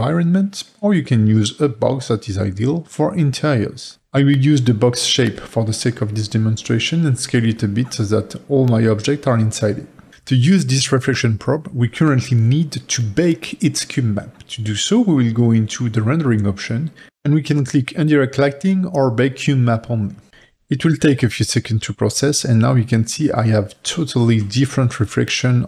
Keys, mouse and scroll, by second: 1.5 click, 2.4 g, 5.8 s, 20.5-22.6 drag, 22.6-23.5 scroll down 1, 23.5-25.6 middle drag.